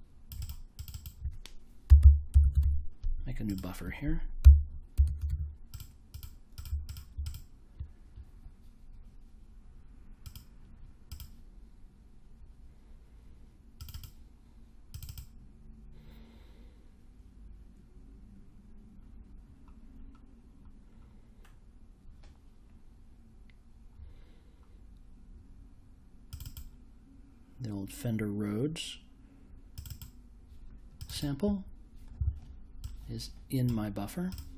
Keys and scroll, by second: 1.5-3.1 typing, 4.4-5.7 typing.